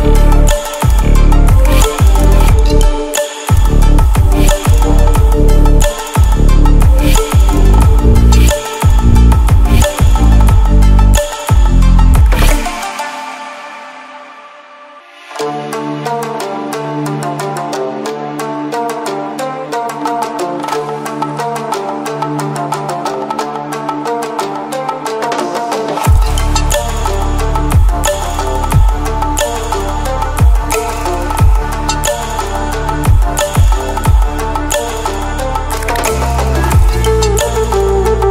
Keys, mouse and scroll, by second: 1.5-2.1 click, 4.5 ctrl+alt+scroll up 2, 6.3 click, 7.7 Down, 9.7 click, 11.7 ctrl+alt+scroll down 1, 12.8 ctrl+alt+scroll up 1, 13.9 click, 16.7 ctrl+alt+scroll down 1, 17.2 ctrl+alt+scroll up 1, 18.9-19.5 drag, 27.0 ctrl+alt+scroll up 1, 27.5-28.2 ctrl+alt+scroll up 1, 28.3 ctrl+alt+scroll up 1, 30.1 click, 31.3 ctrl+alt+scroll down 1, 32.3-33.3 ctrl+alt+scroll down 1, 35.1-35.6 ctrl+alt+scroll down 2, 36.2 ctrl+alt+scroll up 1, 37.1-38.3 drag.